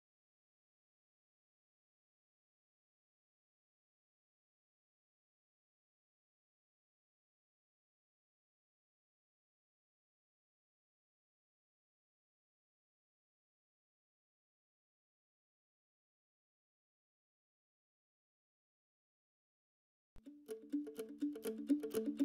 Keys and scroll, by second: 7.9-8.8 typing, 10.5-11.2 typing, 19.7 m.